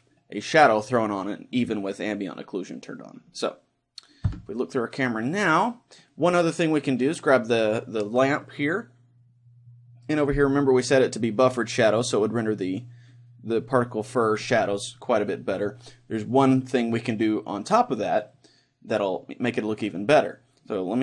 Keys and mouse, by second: 2.2-4.2 middle drag, 4.2 KP_0, 7.0-8.8 right drag.